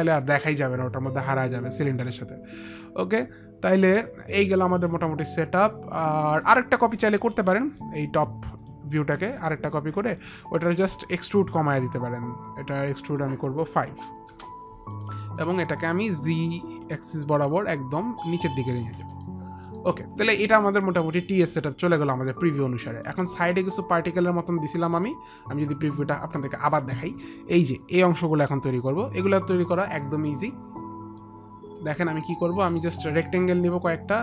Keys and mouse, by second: 2.3 alt+click, 3.6 alt+click, 8.7 click, 9.7 click, 10.9 click, 12.9 click, 13.2 click, 14.4 Return, 14.4 click, 14.4 KP_5, 17.3 click, 18.1 Return, 18.1 click, 18.1 middle click, 19.7 click, 19.8 middle click, 19.8 click, 20.3 alt+click, 24.0 alt+click, 26.1 click, 30.6 click, 32.7 middle click, 32.7 click.